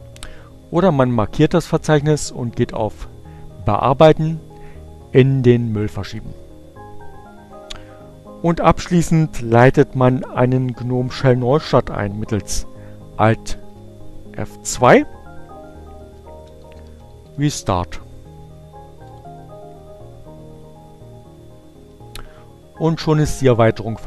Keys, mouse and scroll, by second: 0.2 click, 3.0 click, 10.4 alt+F2, 11.2 r, 11.5 e, 12.9-13.9 typing, 15.6 Return, 23.0 click.